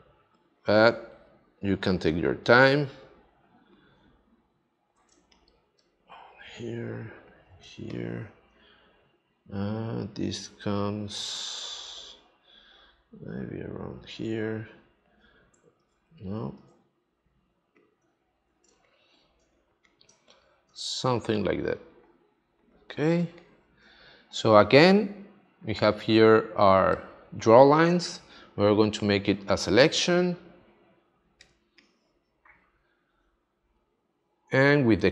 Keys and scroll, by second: 5.1 space, 7.6 space, 15.7 super+z, 18.6 space, 23.2 space, 31.4 space.